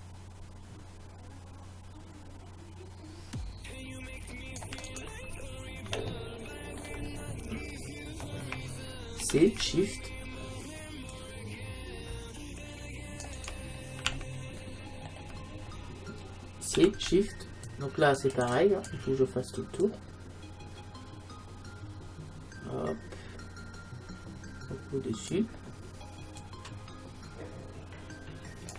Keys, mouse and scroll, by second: 6.0 middle click, 6.6 middle click, 6.8 middle click, 7.3-9.7 middle drag, 9.2 c, 14.2-15.9 middle drag, 16.8 c.